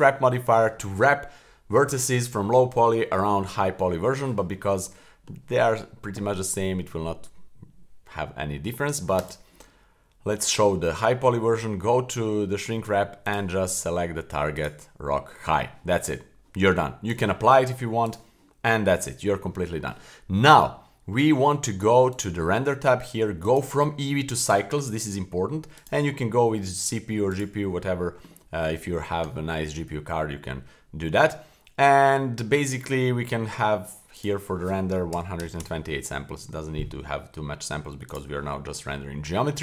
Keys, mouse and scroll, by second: 5.0 middle click, 9.2 click, 13.3 click, 17.1-18.1 drag, 22.1 click, 23.4-24.5 drag, 25.8-27.4 drag, 32.3-34.1 scroll down 1, 34.1-38.1 drag.